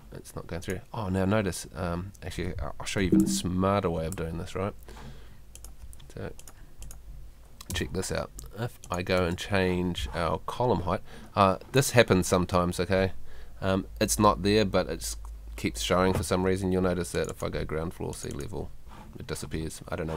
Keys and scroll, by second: 3.0 F2, 7.7 BackSpace, 9.2 BackSpace.